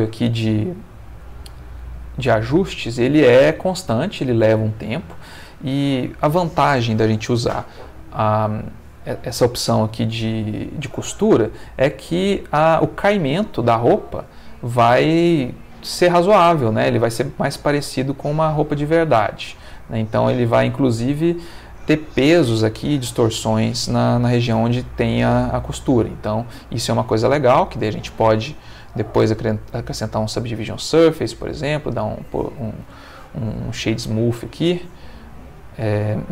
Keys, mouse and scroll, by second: 0.1-1.2 ctrl+middle drag, 1.5 ctrl+middle click, 3.0 middle click, 3.8 Escape, 4.7 middle click, 5.6 ctrl+middle click, 10.9-12.9 drag, 13.8-17.3 middle drag, 17.7-21.7 middle drag, 22.4-23.7 middle drag, 25.2-26.4 ctrl+middle drag, 27.8 click, 28.7 click, 29.9 click, 30.8 right click, 31.2 click, 32.0-34.2 middle drag, 34.4-36.3 middle drag.